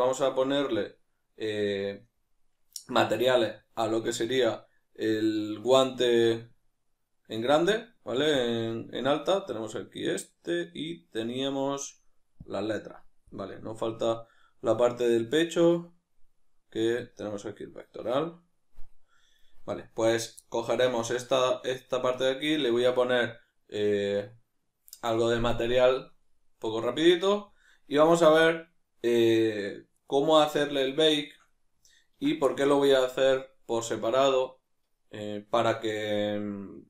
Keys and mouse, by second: 12.5 click, 13.3-17.0 middle drag, 17.0-20.0 drag, 20.0 right click, 20.4-21.3 middle drag, 21.3 right click, 21.8-29.9 middle drag, 29.9 right click, 30.4-36.8 middle drag.